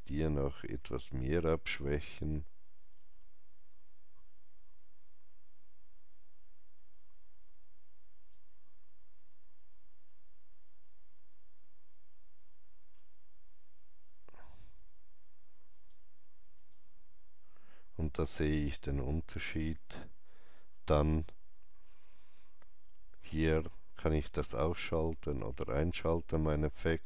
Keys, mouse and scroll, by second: 9.8-10.2 scroll down 1, 12.8-15.1 drag, 12.8-14.6 scroll down 1, 15.6 click, 15.6 scroll down 1, 16.5 click, 17.9 click, 24.2 click.